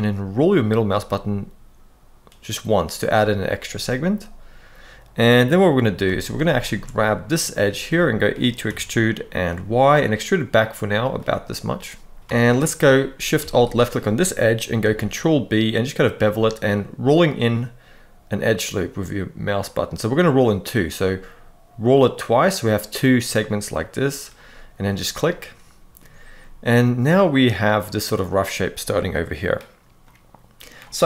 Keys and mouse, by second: 3.1-5.2 middle drag, 5.8 alt+a, 6.4 alt+shift+click, 6.7 middle click, 7.5 middle click, 8.4 e, 9.2 y, 10.7 click, 12.2 alt+a, 14.5 ctrl+b, 23.4 click, 24.3-25.7 middle drag, 26.1-28.2 middle drag, 29.7 middle click.